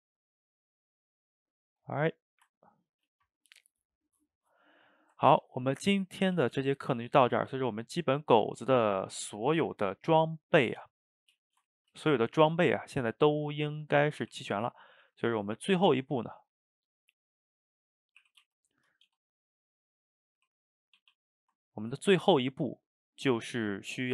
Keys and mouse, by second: 2.3 shift+right click, 2.6-6.2 ctrl+middle drag, 6.2 a, 6.4 a, 6.6-10.1 shift+middle drag, 10.7-11.2 middle drag, 11.2 click, 11.5 shift+right drag, 11.7-14.3 ctrl+shift+middle drag, 14.3 r, 15.1 g, 16.5-18.2 middle drag, 18.2 r, 19.1 g, 19.7-20.4 middle drag, 20.4 r, 21.2 a, 21.3-24.1 ctrl+middle drag.